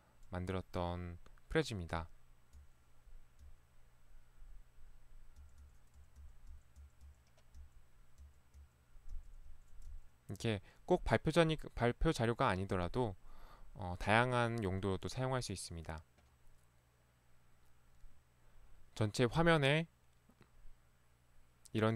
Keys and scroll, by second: 2.6 Right, 3.5 Right, 5.5 Right, 5.7 Right, 6.0 Right, 8.6 Right, 9.3 Right, 9.9 Right.